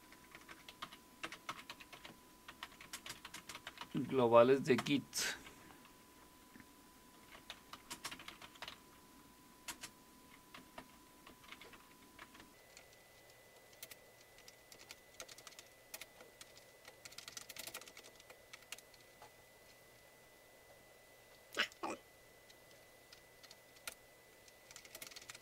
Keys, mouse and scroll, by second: 0.0-4.8 typing, 7.1-19.2 typing, 21.5 Up, 21.8 Left, 22.1-23.4 Left, 23.4 ., 23.5 Delete, 23.9 Return, 24.5-25.4 typing.